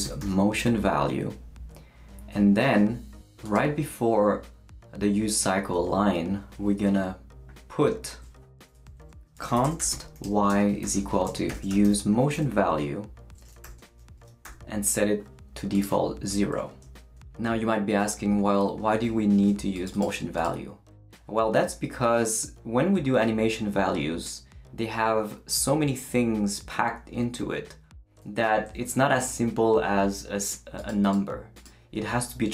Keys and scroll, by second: 0.0-0.7 typing, 6.9 Return, 9.1-12.4 typing, 13.6 shift+9, 14.4 shift+0.